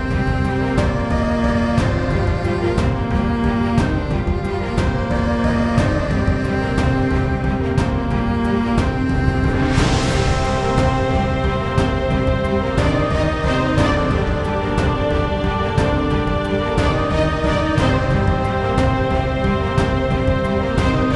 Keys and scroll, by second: 1.6-4.0 typing, 12.9-14.0 typing, 15.0 Return.